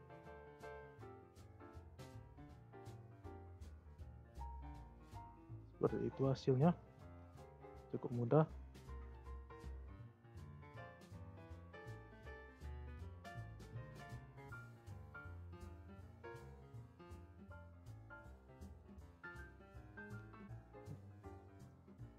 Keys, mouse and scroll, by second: 1.0-2.3 drag, 2.7 scroll up 1, 2.9-4.4 middle drag, 4.4-4.7 scroll down 1, 4.7-7.7 middle drag, 9.6-10.2 scroll down 6, 10.2 click, 10.5-11.4 scroll up 9, 10.5 middle drag, 11.4 click, 11.8 click, 12.2-12.6 scroll down 2, 12.6-13.1 scroll up 3, 13.1-13.7 middle drag, 13.7-14.3 scroll up 4, 14.3-16.8 shift+middle drag, 16.8-18.2 scroll down 1, 18.2-21.1 middle drag, 21.1-21.8 scroll down 2, 21.8-22.1 middle drag.